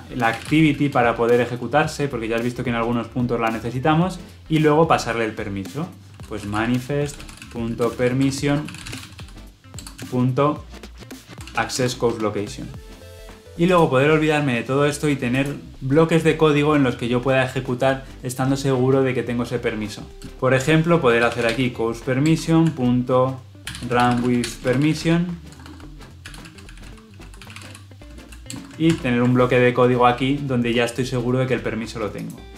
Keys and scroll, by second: 9.7 Return, 20.2 ctrl+z, 22.2 Return, 28.8 ctrl+alt+l.